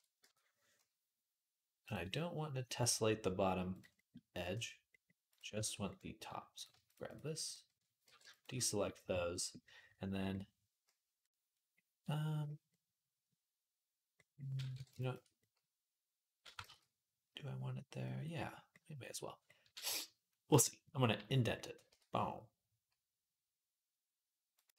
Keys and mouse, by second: 0.0 Tab, 1.7-3.6 drag, 1.9-5.1 middle drag, 1.9-3.0 right drag, 5.1-6.4 shift+drag, 6.4 shift+middle click, 6.8 click, 6.8 shift+a, 6.9 middle click, 7.3 click, 7.5-11.4 shift+middle drag, 7.8 b, 11.4-17.5 drag, 14.5 b, 16.4 ctrl+z, 17.5-24.7 middle drag.